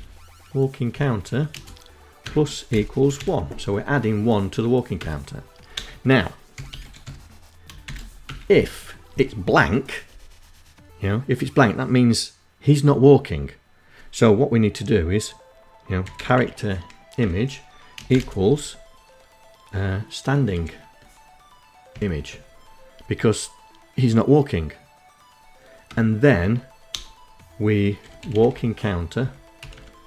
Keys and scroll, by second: 0.0 space, 0.7 KP_Add, 1.2 =, 1.4 space, 1.7 1, 3.5 Return, 4.2-6.1 typing, 6.8 Return, 14.2-15.2 typing, 16.5 space, 16.6 =, 16.7 space, 19.0 s, 20.4 Tab, 24.4 Return, 24.8 Tab, 25.4 BackSpace, 26.7 a, 26.9 k, 27.7 Down, 28.1 Up, 29.0 space, 29.4 0.